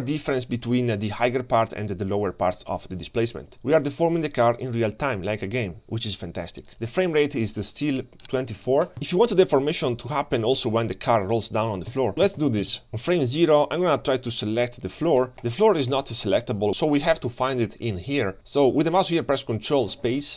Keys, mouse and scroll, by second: 2.2 KP_3, 6.7-12.1 drag, 12.1 space, 12.3 space, 14.1 click, 14.1-14.7 scroll down 4, 14.4-14.7 middle drag, 15.4 click, 15.6 click, 15.9 click.